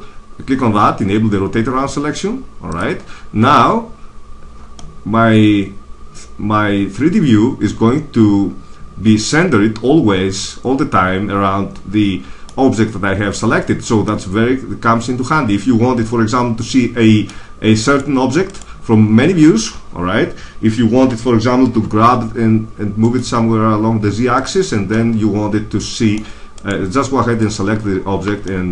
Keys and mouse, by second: 4.7-5.7 middle drag, 12.9-14.4 middle drag, 17.8 right click, 18.5-20.0 right drag, 20.9 g, 24.5 click, 24.8 middle click, 25.1 middle click, 26.1 middle click, 26.5-28.4 right drag, 28.4 middle click.